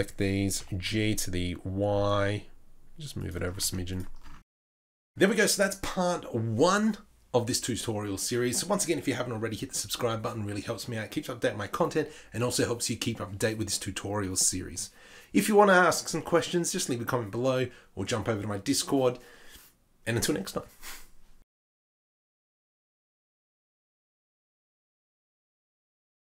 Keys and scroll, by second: 0.6 g, 4.0 z, 4.5 Tab.